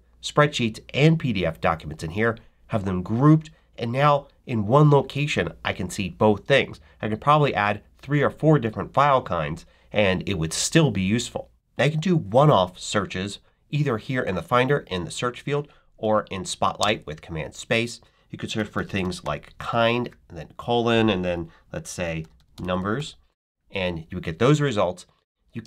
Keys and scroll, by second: 18.2-20.1 typing, 21.7-23.3 typing, 25.5 space.